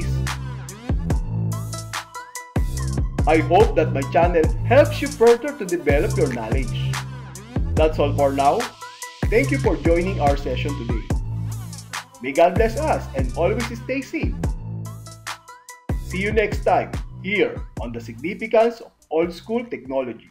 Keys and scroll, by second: 0.2 Left, 2.2 alt+F4, 11.1 alt+n.